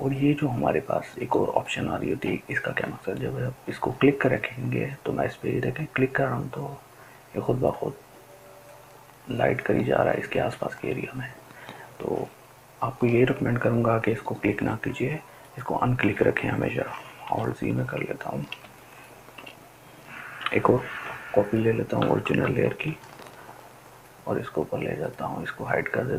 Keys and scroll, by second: 16.8-18.9 ctrl+alt+z, 22.2 ctrl+j.